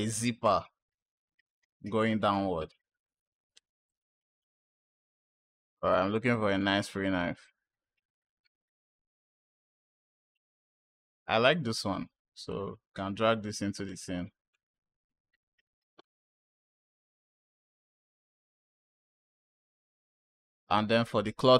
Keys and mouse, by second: 0.5 space, 3.7 click, 3.7 space, 6.4 click, 12.3 click.